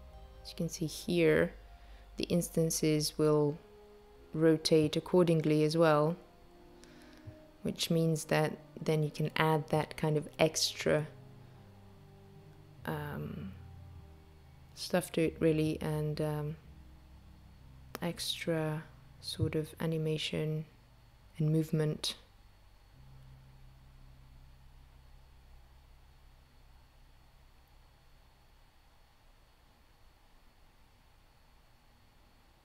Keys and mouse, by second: 6.0 click, 6.7 click, 7.2 click, 7.8 click, 10.6 space, 22.2 click, 29.2 space.